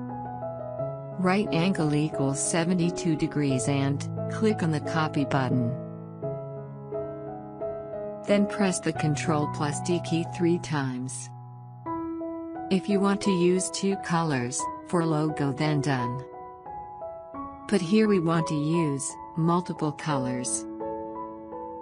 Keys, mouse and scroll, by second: 5.6 click, 9.4 ctrl+d, 11.0 ctrl+d, 12.5 ctrl+d, 13.8 click, 18.1 ctrl+Num_Lock, 18.6 click, 20.7 click.